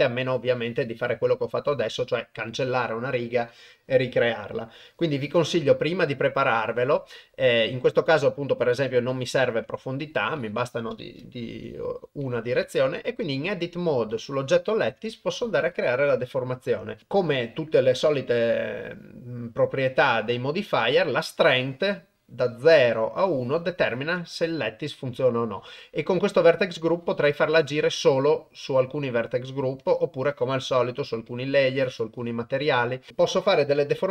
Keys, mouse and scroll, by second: 9.7 Tab, 10.5 click, 11.5 g, 13.0 g, 14.9 Tab, 21.5-24.3 drag, 27.5-28.3 drag, 31.3 drag, 31.8-32.6 drag, 33.1-33.5 drag.